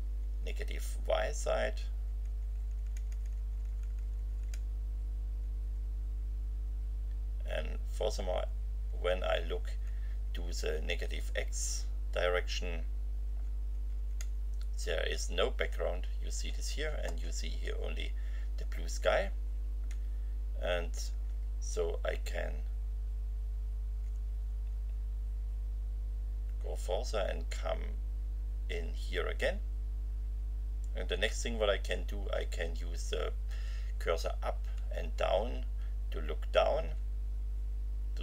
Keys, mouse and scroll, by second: 13.3 BackSpace, 17.9 Left, 19.9 Right, 21.9 Left, 24.7 Left, 34.3 Up.